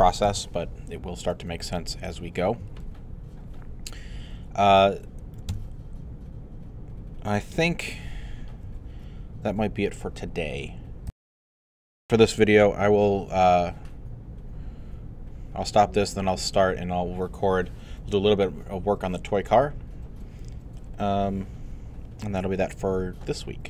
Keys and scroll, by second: 0.2 alt+q, 11.1 super+..